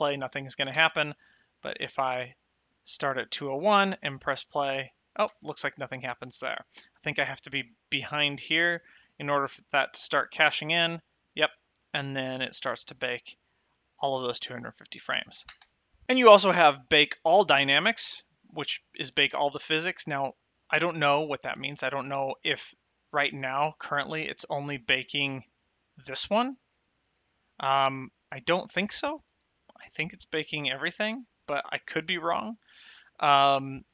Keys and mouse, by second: 1.1 space, 1.7 click, 3.9 space, 5.6 space, 7.1 click, 10.7 space, 15.8 space, 24.1 click, 25.8 click.